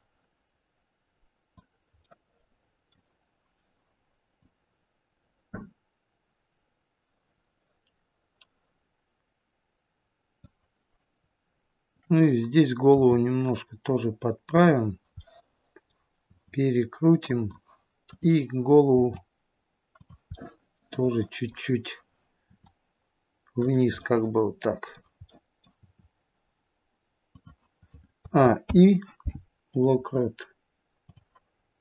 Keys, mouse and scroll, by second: 2.0 middle click, 4.4 click, 11.7 click, 12.8 r, 15.0 middle click, 16.2 r, 17.9 click, 18.8 r, 20.2 middle click, 22.3 r, 23.8 middle click, 25.2 middle click, 25.6 r, 28.2 a, 28.5 i, 31.1 click, 31.6-31.8 scroll down 1.